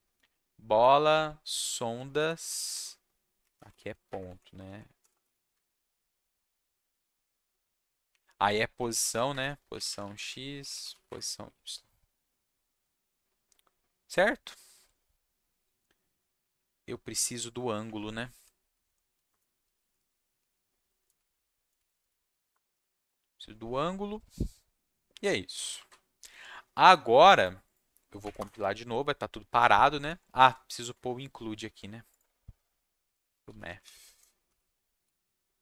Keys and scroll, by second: 0.7 Up, 1.0 Right, 2.1 Right, 2.4 Right, 2.7 Right, 3.7 ., 4.0 Escape, 4.2 Down, 4.6 Right, 5.0 BackSpace, 5.1 BackSpace, 5.5 Escape, 8.1 Up, 8.5-11.4 typing, 9.6 Down, 9.7 Left, 9.9 Left, 10.0 Left, 10.1 Left, 16.3 Up, 16.5 Up, 17.8 Up, 18.0 Up, 18.4 Down, 18.7 Down, 18.8 Down, 19.3 Return, 19.4-23.2 typing, 25.7 ctrl+shift+s, 28.2 Up, 28.3 Return, 32.8-35.6 typing.